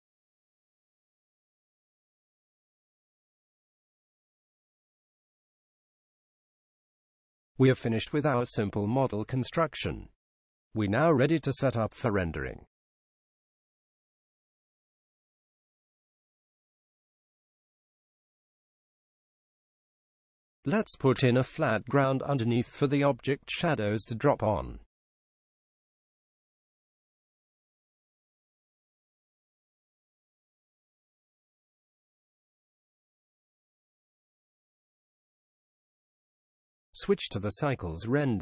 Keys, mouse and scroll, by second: 2.6-4.3 drag, 7.3-12.7 middle drag, 15.6-17.4 drag, 17.6-20.1 drag, 20.5-22.3 drag, 22.7-24.5 drag, 24.8-26.6 drag, 28.7-31.4 middle drag, 32.7-37.4 middle drag, 37.9-38.4 drag.